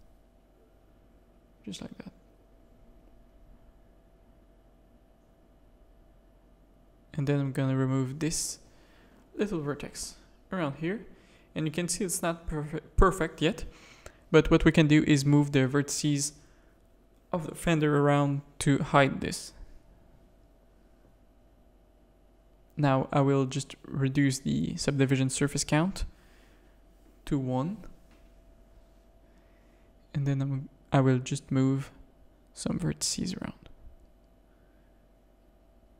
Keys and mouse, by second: 1.2 shift+click, 1.5 f, 1.8 a, 2.2 2, 2.7 middle click, 3.3-5.3 typing, 3.7 middle click, 5.5 click, 7.4 click, 7.7 x, 9.2 x, 9.9 Tab, 10.1 z, 10.5-11.1 drag, 11.4 z, 11.9 click, 13.4 alt+a, 13.7 click, 14.1 Tab, 14.1 a, 14.8-15.9 drag, 15.9 KP_3, 16.8 g, 18.9 Tab, 19.8 click, 22.0 click, 23.4 click, 24.0 click, 25.0 alt+a, 25.5 z, 28.2 click, 28.8 click, 29.1 Tab, 30.5 g, 31.9 g, 32.6 g, 34.2 Tab, 34.6 Tab, 35.2 click, 35.4 g.